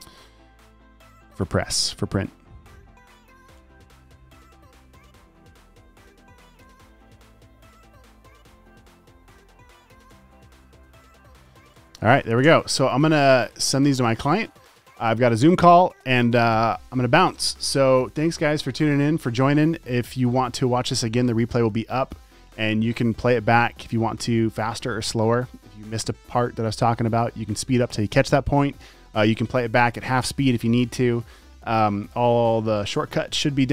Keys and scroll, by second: 0.1 Down, 4.5 Down, 7.5 Down, 10.5 Down, 13.0 space.